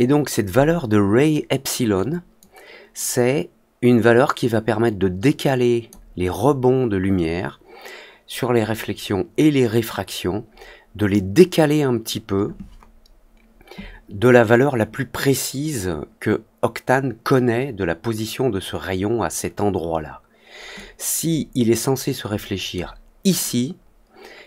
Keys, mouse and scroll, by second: 2.3-5.8 drag, 20.7-22.7 drag.